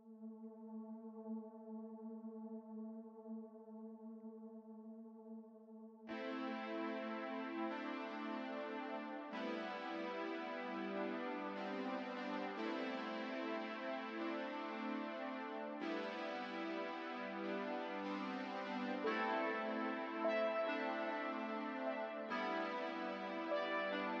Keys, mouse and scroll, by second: 0.1-1.9 typing, 0.2 click, 0.8 middle click, 1.2 middle click, 1.4 middle click, 1.5 scroll down 1, 1.8 middle click, 2.2 shift+middle click, 2.4 scroll down 2, 2.4 shift+middle click, 2.4-3.0 scroll up 3, 2.5 shift+middle click, 3.0-6.8 typing, 3.0 scroll down 1, 3.0 middle click, 3.1 click, 3.1 scroll up 1, 3.3 middle click, 3.4 scroll down 1, 3.6 alt+a, 3.6 middle click, 3.6 Tab, 3.7 middle click, 3.9 scroll up 1, 3.9 middle click, 4.0 scroll down 1, 4.3 scroll up 2, 5.1 shift+middle click, 5.5 middle click, 5.6 middle click, 6.0 middle click, 6.0 Tab, 6.1-6.7 scroll up 2, 6.2 middle click, 6.3 Tab, 6.6 middle click, 6.7 Tab, 6.7 middle click, 6.8 shift+middle click, 7.2 middle click, 7.2-7.6 scroll up 1, 7.6 middle click, 7.7 click, 7.8 z, 7.9 g, 8.1 middle click, 8.2 z, 8.5 middle click, 8.8 alt+a, 8.8 middle click, 8.8 scroll down 3, 9.1 middle click, 9.4 click, 9.5-10.3 alt+scroll up 5, 9.5 KP_3, 9.6 click, 9.8 shift+middle click, 9.9 middle click, 10.1 click, 10.2 KP_3, 10.3 shift+middle click, 10.3 shift+scroll down 1, 10.8 shift+middle click, 10.9-11.9 scroll up 2, 10.9 shift+click, 11.9 middle click, 12.0 scroll down 2, 12.0 shift+middle click, 12.1 scroll up 1, 12.2 middle click, 12.2 scroll down 1, 12.3 alt+click, 13.2 middle click, 13.3 2, 13.4 shift+middle click, 13.4-14.6 scroll up 5, 13.5 middle click, 13.7 middle click, 13.8 ctrl+r, 14.0 shift+middle click, 14.6 z, 14.6 middle click, 14.7 alt+a, 14.7 middle click, 14.8 z, 15.0 scroll down 2, 15.0 shift+middle click, 15.1 middle click, 15.2 click, 15.3 middle click, 15.3 alt+a, 15.4-16.0 scroll up 7, 15.5 middle click, 15.5 alt+a, 15.6 KP_3, 15.8 shift+middle click, 16.0 scroll down 3, 16.1 middle click, 16.1 Tab, 16.2 middle click, 16.3-16.7 scroll up 2, 16.3 middle click, 16.5 click, 16.5 middle click, 16.6 ctrl+click, 16.7 middle click, 16.7 shift+d, 17.1 KP_3, 17.4 e, 17.7 scroll down 1, 18.2 scroll up 1, 18.2 middle click, 18.3 scroll down 1, 18.3 middle click, 18.4-19.4 typing, 18.5 middle click, 18.7 scroll up 2, 18.8 middle click, 18.8 scroll down 3, 18.9 middle click, 19.0 click, 19.3 click, 19.3 shift+middle click, 19.3 scroll up 1, 20.2 scroll down 7, 20.2 middle click, 20.4 scroll up 2, 20.4 middle click, 20.5 ctrl+r, 21.1-24.2 typing, 21.2 scroll up 1, 21.3 middle click, 21.6 shift+middle click, 21.7 scroll down 3, 21.7-22.2 scroll up 5, 21.8 middle click, 21.8 click, 22.0 Tab, 22.2 scroll down 1, 22.3 Tab, 22.3 scroll up 1, 22.4 shift+middle click, 22.5 scroll down 1, 22.7 middle click, 22.7 Tab, 22.8 middle click, 22.8 scroll up 3, 22.9 alt+click, 23.3 shift+middle click.